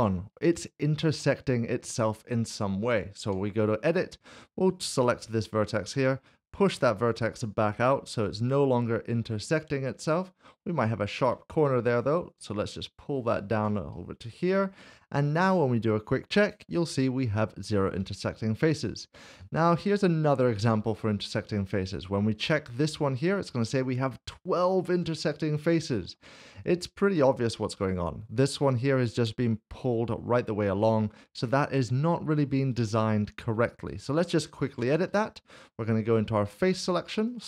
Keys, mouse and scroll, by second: 0.6 shift+middle click, 3.2 Tab, 5.1 click, 6.3 g, 8.1 Tab, 8.7 middle click, 11.5 Tab, 13.2 click, 13.6 Tab, 13.9 middle click, 16.4 click, 19.1 shift+middle click, 21.0 click, 21.2 middle click, 21.6 shift+middle click, 22.8 shift+middle click, 25.0 click, 25.2 middle click, 25.5 shift+middle click, 26.8 scroll down 1, 27.8 alt+z, 30.8 alt+z, 30.8 middle click, 32.8 alt+z, 33.4 scroll up 1, 34.7 Tab, 35.1 middle click, 36.1 3, 36.8 click, 37.3 alt+click.